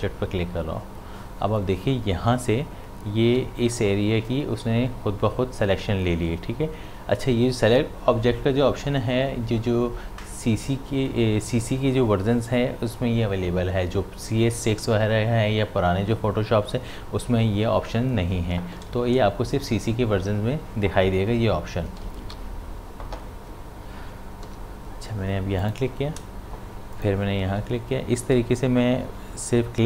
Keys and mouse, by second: 21.9 d, 22.2 v, 25.6 click, 26.9 shift+click.